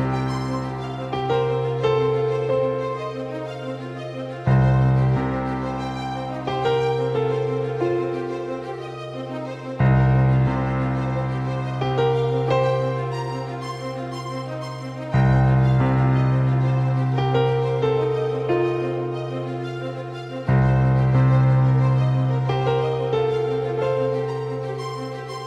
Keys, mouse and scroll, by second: 2.5 s, 7.7-10.1 drag, 16.9-18.5 middle drag, 18.5 click, 21.7 KP_5, 22.4 KP_1, 23.2 KP_3, 23.7 KP_5.